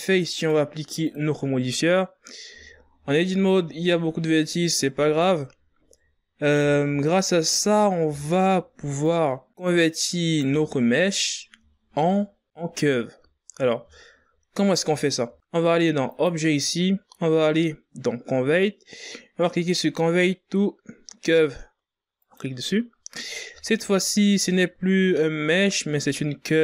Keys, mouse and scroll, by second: 1.1 Tab, 1.6 scroll up 2, 1.8 a, 2.7 scroll up 2, 3.5 Tab, 3.8-4.5 scroll down 8, 5.5-6.6 scroll up 10, 6.6 Tab, 7.6 right click, 9.0 Tab, 9.4 scroll down 5, 10.3-10.8 ctrl+scroll up 3, 10.9-12.0 scroll down 10, 12.6-13.8 shift+scroll up 1, 13.8 click, 14.6-17.7 drag, 22.2-23.0 ctrl+scroll up 9, 24.1 Tab, 25.4 right click.